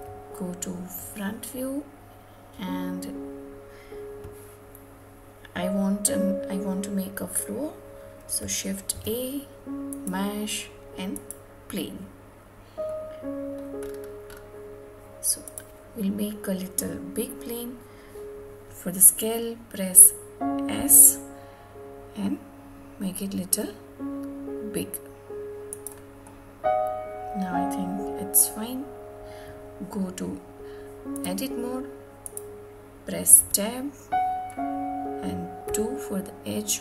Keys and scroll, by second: 31.9 Tab.